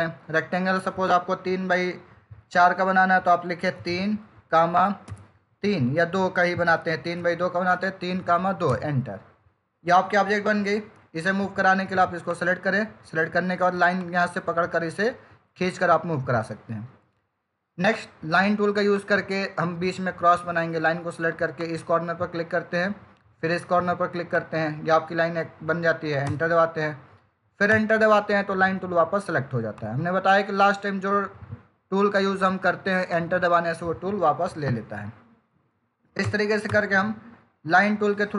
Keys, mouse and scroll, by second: 3.6 3, 5.3 ,, 7.1 2, 8.6 Return, 12.2 click, 18.8 click, 24.2 click, 26.2 Return, 29.7 click, 33.0 click, 36.1 Return.